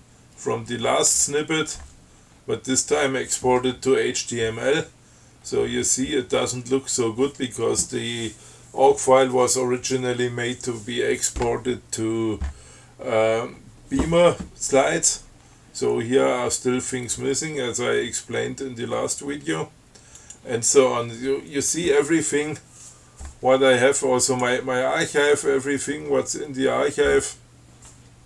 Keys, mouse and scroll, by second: 2.6 scroll down 2, 4.9-5.3 scroll down 2, 5.3-6.2 scroll up 4, 6.5-7.3 scroll down 4, 14.9-15.4 scroll up 3, 15.7 scroll down 2, 20.4 click, 24.5 click, 25.4-26.1 scroll down 2, 26.3-27.3 scroll up 3.